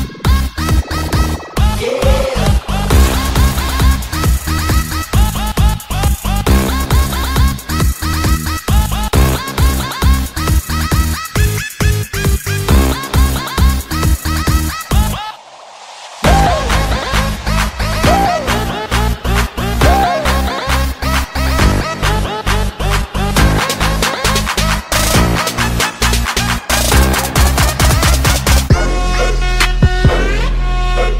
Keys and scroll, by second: 4.8 space, 7.0 ctrl+z, 8.0 ctrl+z, 17.8 ctrl+z, 18.0 ctrl+z, 18.3 space, 19.5 ctrl+z, 23.6 space, 24.0 space, 24.8 ctrl+z.